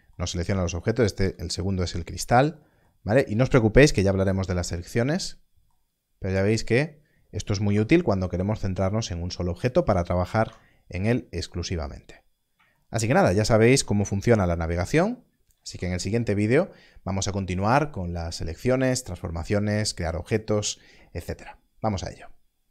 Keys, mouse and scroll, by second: 0.7 /, 1.1 click, 2.1 right click, 4.0 /, 6.6 click, 7.6 /, 10.4 /, 12.2 scroll up 1, 14.0 scroll up 1, 15.6 alt+a.